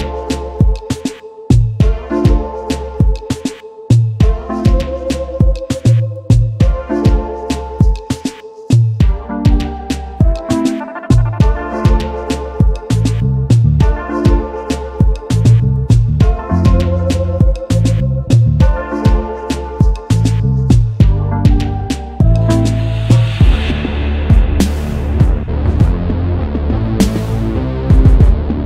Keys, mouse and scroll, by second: 0.0-0.3 alt+scroll up 1, 0.9 v, 1.3 alt+scroll up 1, 1.8 space, 2.4 space, 3.3 alt+scroll down 1, 13.8-14.6 typing, 17.0-17.4 alt+scroll down 1, 17.4-18.0 alt+scroll up 1, 18.3 double click, 18.6 space, 22.6 ctrl+c, 22.8 ctrl+f.